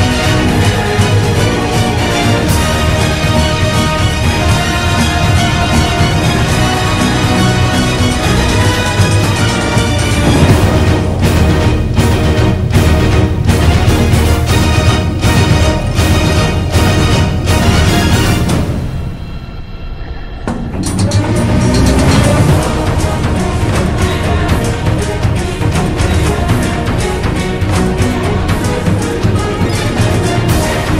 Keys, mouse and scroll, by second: 9.1 ctrl+-, 10.3 ctrl+z, 12.1 ctrl+t, 12.6 ctrl+-, 12.7 ctrl+=, 14.7 ctrl+z, 15.5 ctrl+t, 20.3 b, 23.0 ctrl+=.